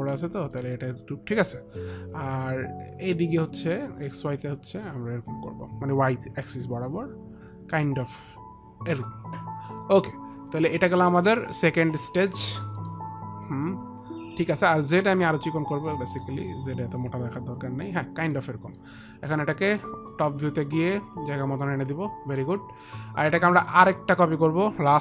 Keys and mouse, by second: 0.8 click, 3.5 click, 12.6 middle click, 13.1 middle click, 13.8 alt+click, 15.8 alt+click, 15.8 middle click, 18.7 middle click, 19.1 middle click, 20.5 click, 22.8 middle click, 22.8 click, 23.4 click, 24.0 middle click, 24.0 click.